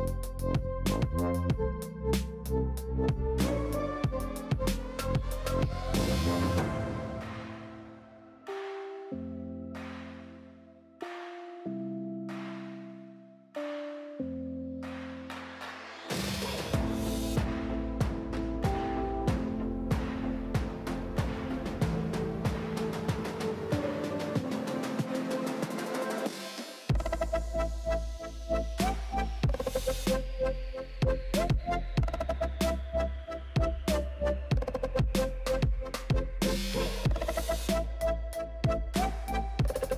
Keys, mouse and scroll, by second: 0.4 s, 2.7 middle click, 3.5 s, 5.1-6.4 middle drag, 6.4 s, 7.6 shift+middle click, 7.9 g, 9.0-10.2 middle drag, 10.2 s, 11.2-12.9 shift+middle drag, 12.9 click, 14.1 l, 14.4-14.9 scroll down 2, 14.9 middle click, 15.2 scroll down 1, 15.4 shift+middle click, 16.1 KP_3, 16.6-17.1 scroll up 2, 17.1 shift+d, 18.7 shift+middle click, 19.0-19.7 scroll up 5, 19.2 alt+z, 19.7 g, 22.1 middle click, 22.5 alt+z, 22.6-24.0 shift+middle drag, 24.0 s, 25.7-27.4 middle drag, 30.5 shift+middle click, 30.8 alt+z, 31.6 click, 31.9 alt+z, 32.2 alt+z, 32.5 click, 32.9 3, 33.1 click, 33.4 alt+z, 33.6 shift+middle click, 33.9 g, 35.6 click, 35.8 Tab, 35.9 click, 36.1-37.0 middle drag, 37.0 scroll up 1, 37.2-38.6 shift+middle drag, 38.6 click, 38.8 Tab, 39.3 l, 39.7 shift+middle click.